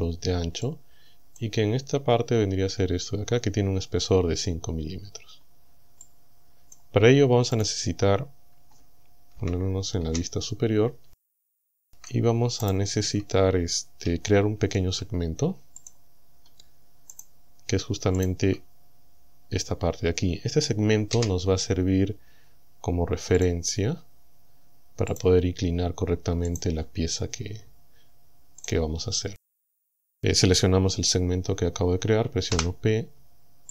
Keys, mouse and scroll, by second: 0.7 click, 5.1-5.9 scroll down 5, 6.1 click, 7.6 click, 9.4 KP_1, 10.2 KP_7, 11.9 Tab, 12.7 right click, 13.1 Tab, 14.3 shift+middle click, 15.8 click, 16.3 scroll up 2, 17.2 right click, 18.2 shift+right click, 21.2 f, 23.4 click, 25.2 click, 26.5 right click, 28.6 right click, 32.6 p.